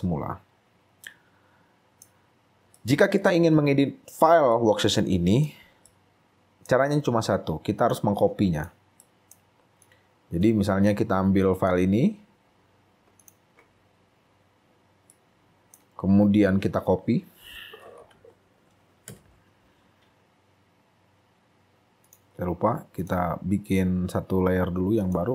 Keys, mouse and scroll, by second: 0.1 scroll down 1, 0.3 scroll up 3, 0.6-1.2 scroll down 3, 1.2 right click, 6.0 right click, 7.7 right click, 7.9 shift+click, 9.2 right click, 11.0 right click, 12.1 scroll up 2, 12.7 scroll down 2, 13.3 ctrl+click, 14.8 ctrl+click, 14.8 scroll down 1, 15.2 shift+right click, 17.9-18.8 typing, 19.2 Return.